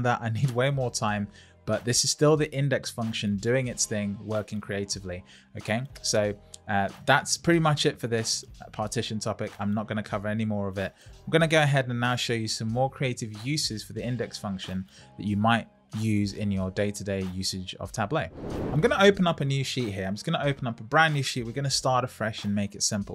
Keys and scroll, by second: 19.2 Return.